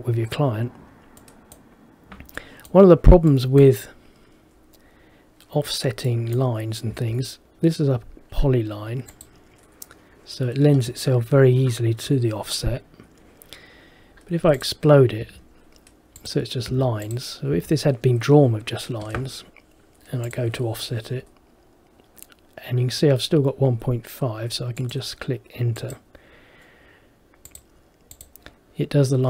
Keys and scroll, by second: 7.0 Escape, 15.3 Escape.